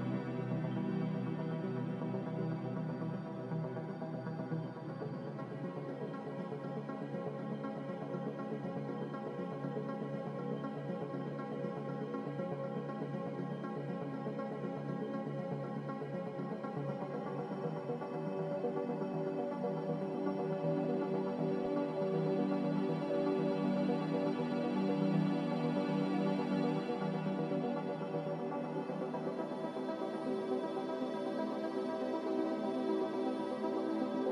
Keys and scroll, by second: 7.0 5, 22.4 2.